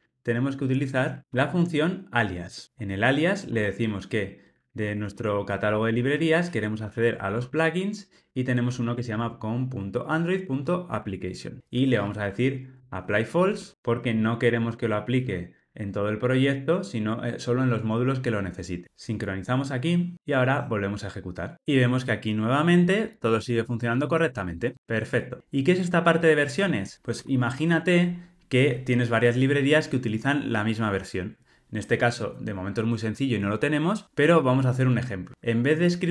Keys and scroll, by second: 2.4 Return, 10.9 Tab, 12.7 Return, 20.4 ctrl+r.